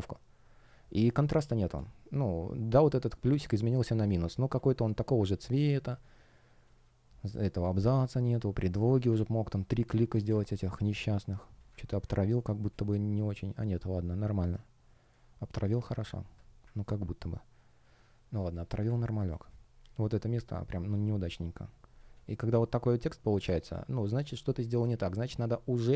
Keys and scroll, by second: 1.2 space, 3.7 space, 7.7 space, 10.5 space, 12.2 shift+0, 12.6 space, 19.2 space, 20.8 space, 24.3 space.